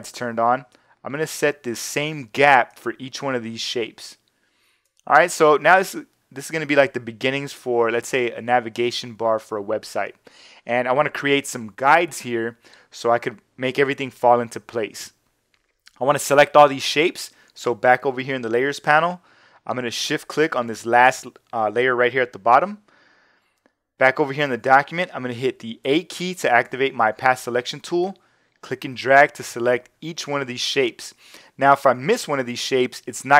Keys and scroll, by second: 25.8 a.